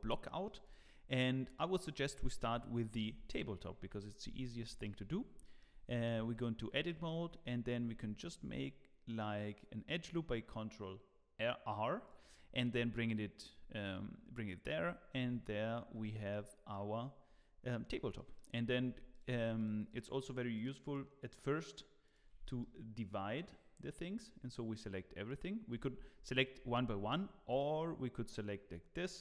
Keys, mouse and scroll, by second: 0.2 middle click, 0.6 click, 1.4 scroll, 1.5 click, 2.5 KP_1, 3.1 Tab, 3.9 z, 4.2 scroll up 2, 4.6 shift+middle click, 5.0-5.3 scroll up 2, 5.4 shift+middle click, 6.8 scroll up 2, 7.7 shift+middle click, 14.4-15.0 scroll down 5, 15.3 t, 15.9 z, 16.4 middle click, 17.5-18.1 scroll down 1, 18.1 middle click, 18.9 middle click, 19.1 3, 19.5 click, 22.4 shift+click.